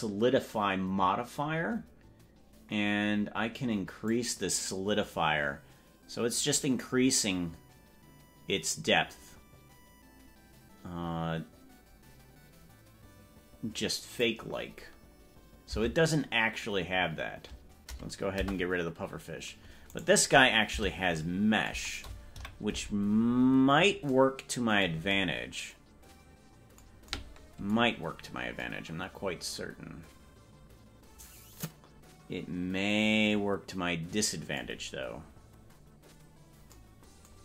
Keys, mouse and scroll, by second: 4.1-14.2 drag, 15.9 Tab, 19.1 Delete, 20.1 right click, 20.7 Tab, 22.5 KP_Decimal, 23.3-24.1 scroll down 16, 28.1-28.5 scroll up 5, 35.3-36.1 scroll down 6, 35.9 scroll up 1.